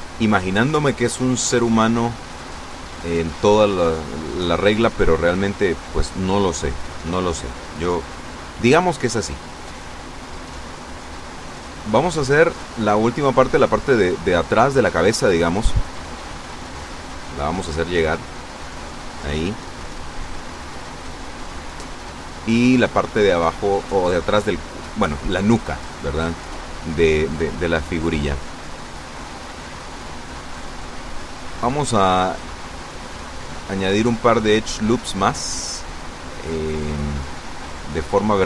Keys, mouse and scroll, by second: 0.0 click, 1.4-3.1 drag, 4.4 a, 10.9 b, 11.4-12.4 drag, 13.5-15.9 drag, 16.3-18.0 drag, 19.0 a, 19.5 b, 20.2-21.2 drag, 21.7-22.8 drag, 30.8 ctrl+r, 31.7 click, 33.5 click, 35.3 ctrl+r, 36.3 click, 37.5 click.